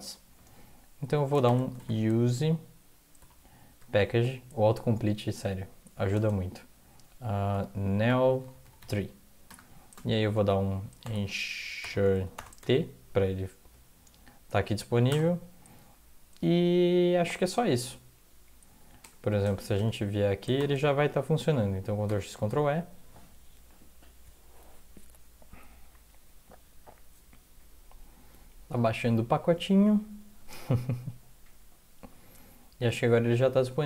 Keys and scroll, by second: 1.2-3.2 typing, 6.1 space, 7.3-12.3 typing, 14.5-15.6 typing, 19.0 BackSpace, 19.7 BackSpace, 20.5 shift+0, 22.0 ctrl+x, 22.3 ctrl+e.